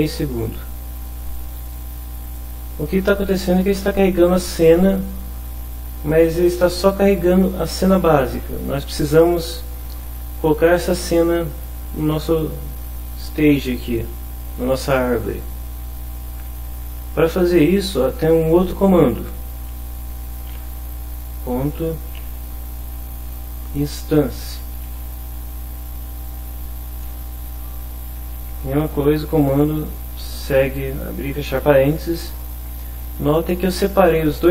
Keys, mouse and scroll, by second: 0.1 click, 1.3 click, 1.7 click, 2.2 click, 20.5 ., 22.1 i, 22.3 n, 23.2 Down, 24.9 Return, 27.0 Home, 28.1 End, 29.3 BackSpace, 31.9 Left, 33.1 Right, 33.9 Right, 34.3 Left.